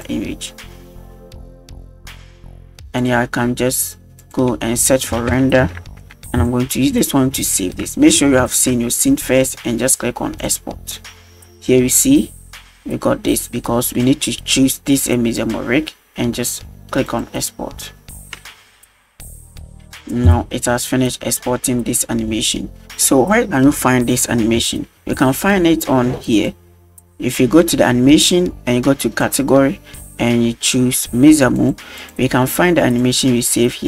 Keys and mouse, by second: 4.2-6.5 drag, 7.5 shift+middle drag, 8.5 ctrl+s, 10.4-12.2 drag, 13.9-15.5 drag, 17.1-19.1 drag, 22.8 space, 26.4 click, 29.2-31.7 drag, 32.0-33.2 drag.